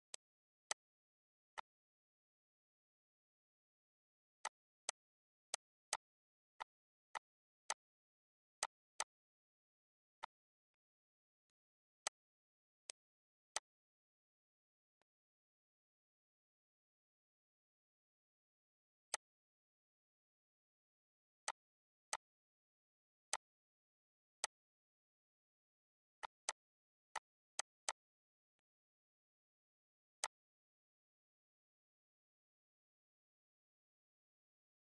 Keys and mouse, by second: 0.1 click, 1.5 ctrl+click, 4.4 click, 5.4 click, 7.6 shift+click, 8.6 shift+click, 8.9 click, 10.2 click, 10.9 click, 11.4 click, 12.8 click, 15.0 click, 19.1 click, 21.4 click, 22.1 click, 23.3 click, 24.3 click, 25.1 Return, 26.1 click, 27.1 click, 28.5 click, 29.7 click, 30.1 click.